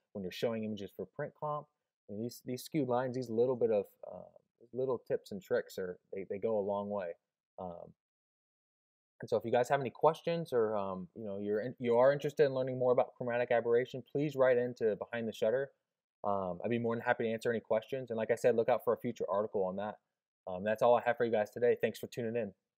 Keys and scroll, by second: 3.3 Left, 3.9 Right, 4.6 Left, 5.1 Right.